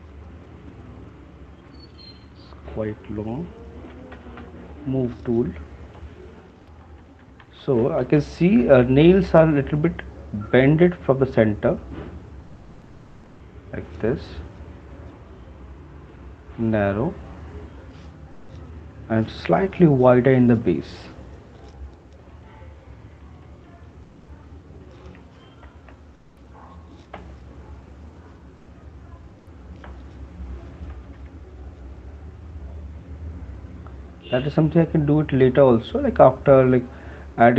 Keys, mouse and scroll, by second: 3.0 click, 4.4-5.1 typing, 7.1-9.0 typing, 12.1 click, 12.9 click, 13.5 click, 13.9 click, 15.9 shift+click, 16.9 shift+click, 17.1 click, 18.3 shift+click, 19.8-20.2 [, 20.4 [, 20.6 [, 20.8 [, 22.4-23.9 typing, 25.2 click, 25.9 ctrl+z, 27.1 x, 30.0 x, 31.0 [, 31.2 [, 32.2 click, 33.3 click, 34.3 click, 34.5 click, 35.3 click, 36.0 click, 36.4 click, 37.0 click, 37.4 click.